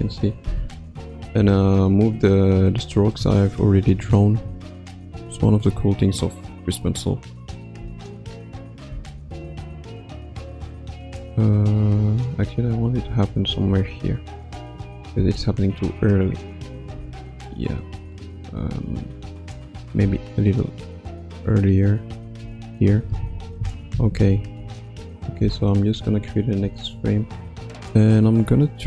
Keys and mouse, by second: 0.0 n, 1.4 Tab, 3.1 Tab, 4.5 Left, 4.8 Right, 6.5-7.7 drag, 7.8 space, 8.9 space, 9.9-11.8 drag, 12.8 g, 14.7-15.1 drag, 15.2 space, 16.9 space, 17.6 click, 20.0 g, 21.1 click, 22.1 space, 22.4 space, 23.2 Left, 23.5 Left, 23.9 Left, 24.2 Right, 24.5 Right, 25.4 i, 26.8 ctrl+s, 28.5-28.8 drag.